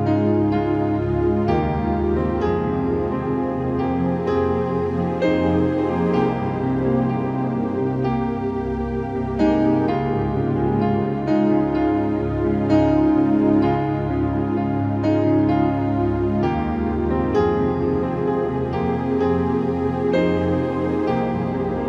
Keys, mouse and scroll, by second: 1.2 v, 1.6-6.1 drag, 2.8 ctrl+t, 5.5 Return, 6.0 Down, 10.1 click, 13.7-14.3 scroll up 1, 14.3 space, 14.4 click, 14.6 scroll up 1, 15.3-21.7 drag.